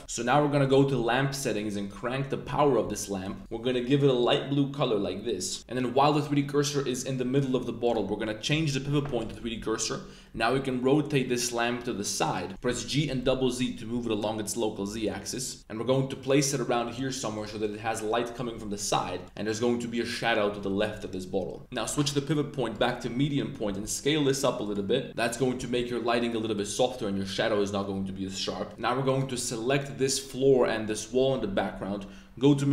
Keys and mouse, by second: 0.6 click, 1.9-3.2 drag, 3.4 click, 7.9-9.3 drag, 10.3 r, 13.0 z, 13.2 z, 14.9 click, 15.6 z, 17.3 click, 19.2 drag, 21.9 click, 23.6 s, 24.6 click, 25.5 s, 29.0 click, 29.6 click, 32.4 click.